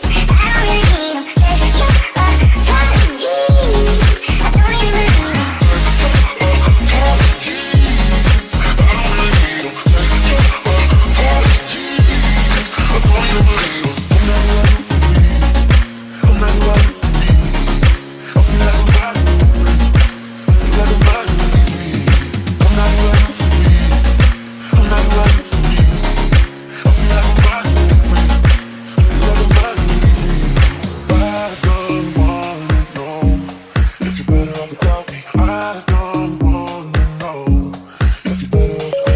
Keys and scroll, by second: 1.2 d, 3.1 Escape, 8.3-12.8 typing, 23.3-26.9 typing, 28.6-32.8 typing, 34.9 ctrl+z, 36.3 a, 38.3-39.1 typing.